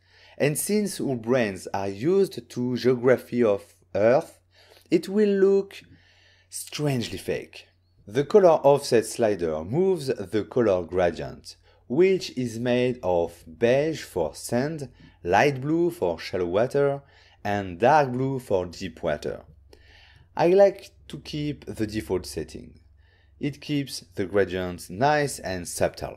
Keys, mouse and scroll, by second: 0.6 click, 7.8 right click, 9.3 shift+click, 15.8 shift+right click, 19.0 ctrl+middle click, 23.8 middle click, 26.0 click.